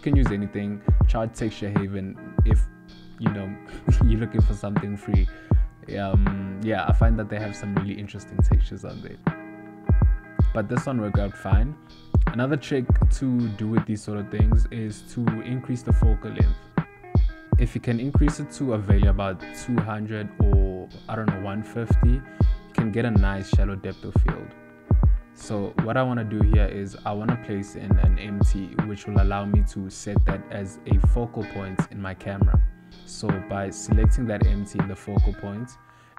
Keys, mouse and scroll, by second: 9.0 click, 9.7 click, 16.0 ctrl+middle click, 16.2 middle click, 16.9 click, 18.6 middle click, 23.4 shift+a, 25.8 s, 27.1 s, 28.1 click, 29.1 click, 32.0 click.